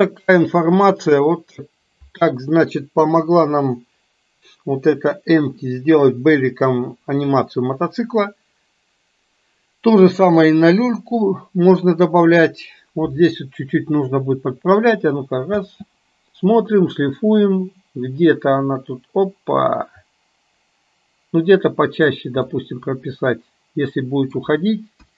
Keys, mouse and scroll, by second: 15.6 space, 16.6-22.2 drag, 22.7-24.5 middle drag, 25.0 KP_1.